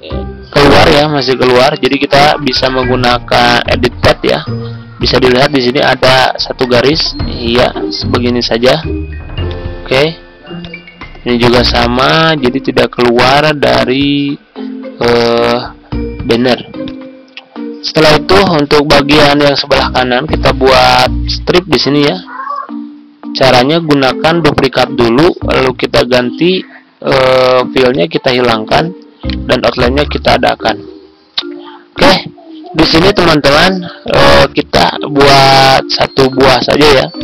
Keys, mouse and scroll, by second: 3.7-12.7 drag, 24.3 ctrl+d, 24.7-25.7 drag, 29.2 right click, 30.0 click, 31.3 z, 31.8 click, 37.1-37.2 drag.